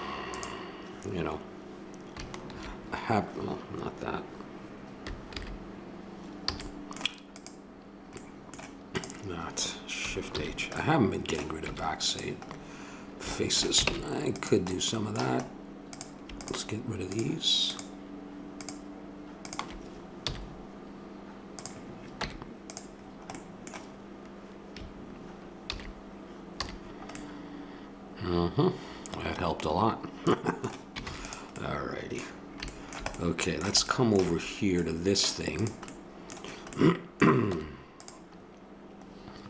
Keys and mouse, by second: 2.5 shift+h, 5.2 alt+h, 6.5 a, 7.3-8.1 right drag, 8.1-8.6 drag, 9.9-10.7 drag, 10.3 shift+h, 11.7 Tab, 13.8 ctrl+Tab, 15.9-20.2 drag, 20.2 x, 22.2 Tab, 25.7 alt+h, 26.5 a, 26.9-27.2 middle drag, 27.3 middle click, 31.0 ctrl+s, 35.7-36.0 drag, 36.0-37.3 middle drag, 37.4 Tab.